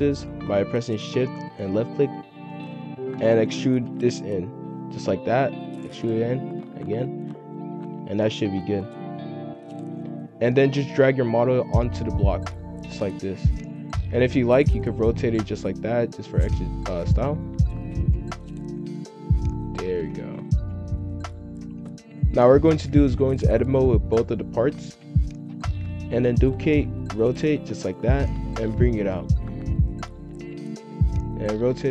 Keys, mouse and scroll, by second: 1.9 shift+click, 2.3 shift+click, 3.2 e, 10.0 F2, 11.2 g, 14.5 r, 15.3 g, 16.7 r, 18.0 g, 19.9 r, 20.5 g, 22.1 F2, 23.8-24.9 drag, 24.9-26.6 typing, 28.1-29.3 drag, 30.6 r.